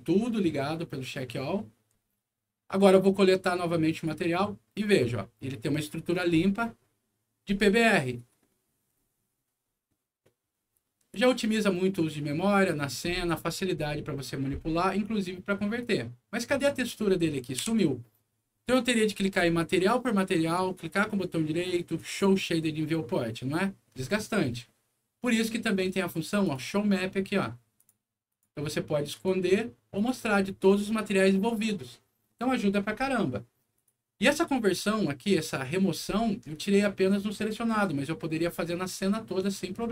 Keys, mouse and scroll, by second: 3.9 click, 5.8-6.7 scroll up 2, 8.4 middle click, 9.0 scroll down 1, 9.5 scroll up 2, 9.7 middle click, 10.1-10.8 scroll down 4, 15.7 click, 16.4 click, 16.9 scroll up 2, 17.5 F4, 19.0-19.4 scroll up 2, 20.4 right click, 21.9 click, 24.6 scroll down 1, 24.8 scroll up 1, 26.4 click, 27.7 click, 28.2 click, 29.1 click, 29.9 click, 31.4 scroll down 1, 33.7 click, 34.1 scroll down 2, 34.6 scroll up 2, 38.9 click.